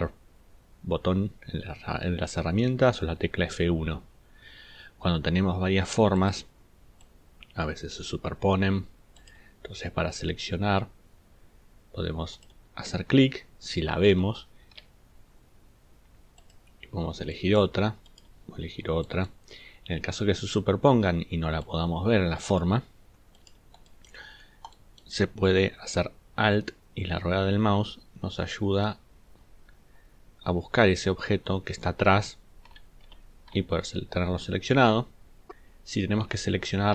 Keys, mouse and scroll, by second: 14.5 ctrl+scroll up 2, 26.8 alt+scroll up 2, 27.5-28.1 alt+scroll up 4, 28.6 alt+scroll down 2, 28.6 alt+scroll up 2, 29.3 alt+scroll down 2, 29.9 alt+scroll up 1, 30.1 alt+scroll down 1.